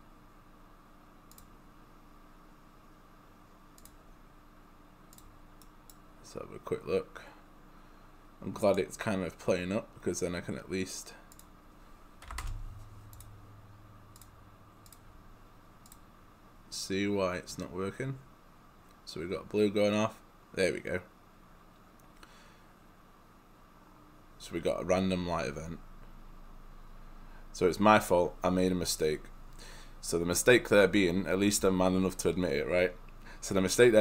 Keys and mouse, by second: 2.0 click, 5.7 right click, 11.4 click, 12.3 5, 12.5 Return, 13.2 click, 14.9 click.